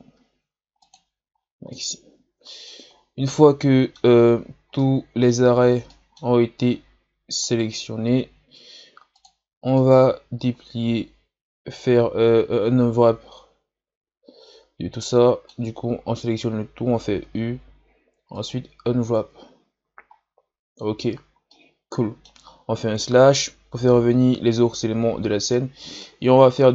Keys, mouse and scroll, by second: 0.2 ctrl+e, 1.4 scroll down 2, 1.7-2.9 middle drag, 2.9 scroll down 5, 3.3 middle click, 4.2 scroll up 3, 4.8-7.5 middle drag, 7.5 alt+right click, 8.4 ctrl+e, 9.7-12.8 middle drag, 16.0 a, 17.2 u, 19.5 scroll down 1, 20.2-21.0 scroll down 1, 21.1 scroll down 1, 21.5-23.1 middle drag, 23.1 KP_Divide, 24.7-25.1 scroll down 3, 25.5-26.7 middle drag.